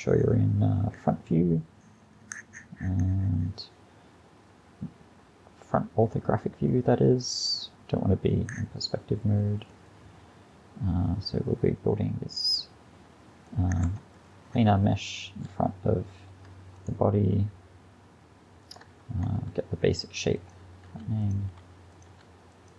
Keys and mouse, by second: 9.9-11.7 middle drag, 14.0 KP_1, 19.4 e, 20.9 r, 21.6 g, 22.1 r.